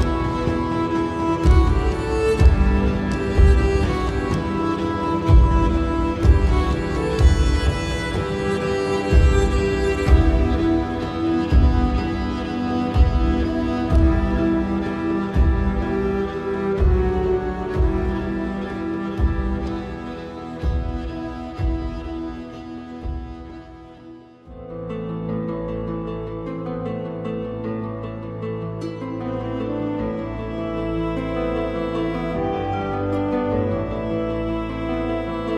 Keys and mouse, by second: 5.4 click, 8.0-9.0 drag, 13.0 click, 13.9 shift+click, 15.0 ctrl+x, 16.3 3, 17.2 click, 17.9 middle click, 22.8 middle click, 22.8 e, 24.0 middle click, 24.6 click, 25.1 middle click, 26.9-28.6 middle drag, 30.7 click, 31.7 KP_1, 32.5 shift+middle click, 34.1 click, 34.8 shift+click.